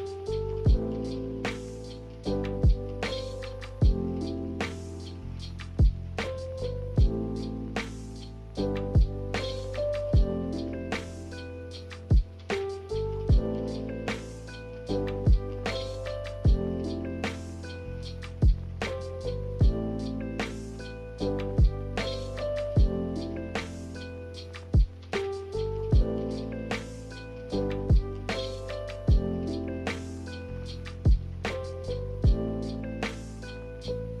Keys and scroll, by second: 6.6 b, 10.5 m, 28.8 ctrl+z.